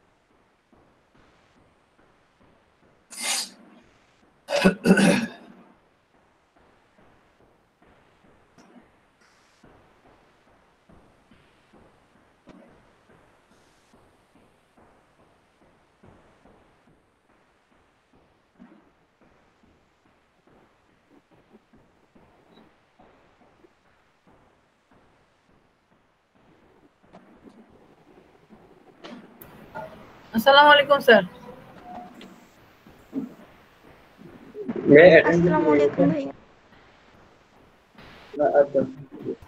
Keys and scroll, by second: 12.3-13.9 typing, 14.3 Return.